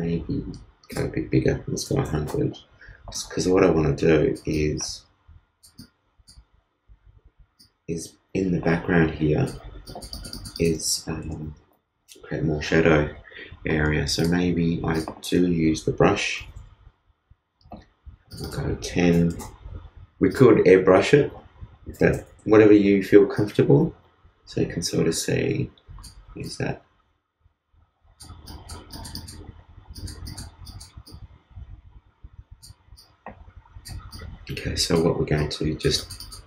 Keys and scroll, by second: 11.2 super+z.